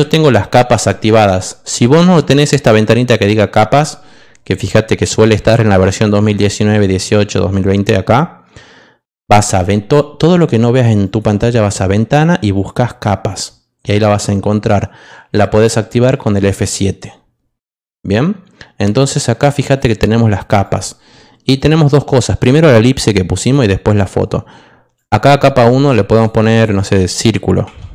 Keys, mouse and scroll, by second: 11.0 click, 19.6 click, 20.6 click, 21.5 click, 23.4 click, 24.9 click, 26.1 click, 26.3 click, 27.6 Caps_Lock.